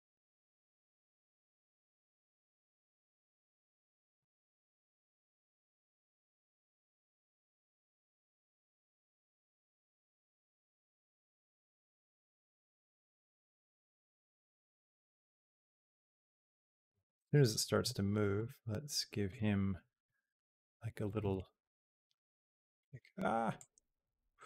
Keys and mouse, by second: 0.0 r, 2.6 r, 4.7-7.4 drag, 7.9 click, 8.7 g, 10.5-17.2 drag, 18.1 g, 19.9-20.9 drag, 21.1 g, 23.4-24.4 drag.